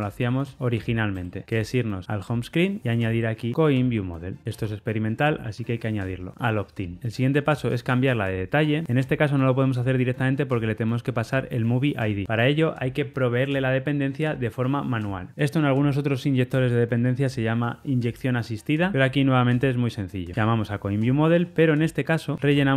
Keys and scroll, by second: 2.0 super+b, 4.5 alt+Return, 6.9 super+[, 6.9 ctrl+alt+Left, 20.3 Tab.